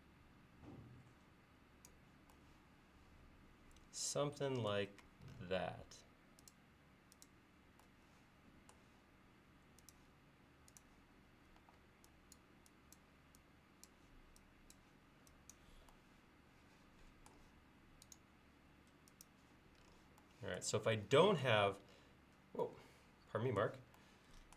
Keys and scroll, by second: 5.1 l, 11.7 e.